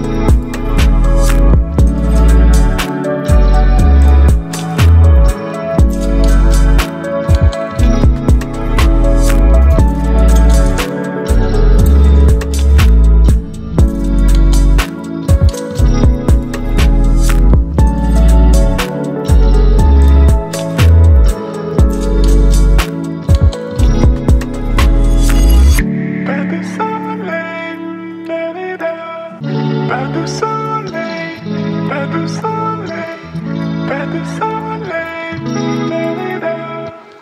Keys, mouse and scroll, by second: 0.4-2.9 drag, 4.5 v, 5.2-7.7 drag, 8.3 ctrl+t, 10.0-11.2 drag, 17.8 b, 19.0 click, 25.4 click, 25.4-26.3 alt+right drag, 29.0 Return, 30.2-32.1 alt+right drag, 34.6-37.2 drag.